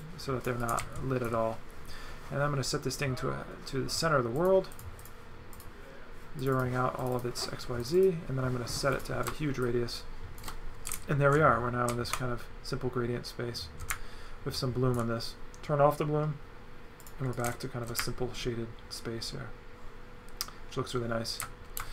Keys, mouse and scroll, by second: 0.0 click, 0.7 right click, 1.3 z, 4.4 click, 5.5 click, 6.4 click, 7.0 click, 7.8 click, 9.0 click, 9.6 shift+click, 10.9 right click, 17.0 click, 17.4 right click, 21.4 right click.